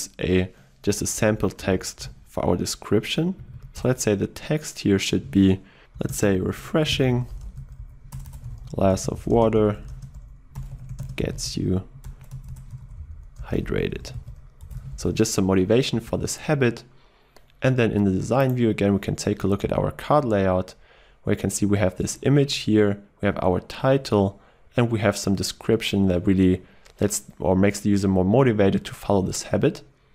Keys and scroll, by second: 3.8 Return, 16.4 ctrl+s.